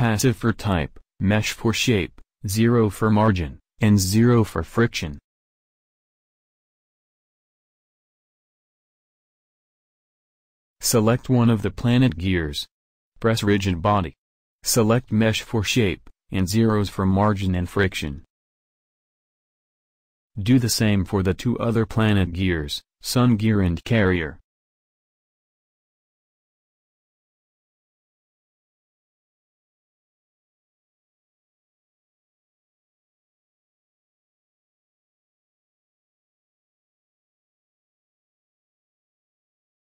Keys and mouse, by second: 1.7-5.9 drag, 6.1-7.8 drag, 10.7-11.9 drag, 11.9 middle click, 12.4-14.8 drag, 15.4-20.3 drag, 20.5 click, 25.0-26.9 drag, 27.5-30.4 drag, 36.6-37.9 middle drag.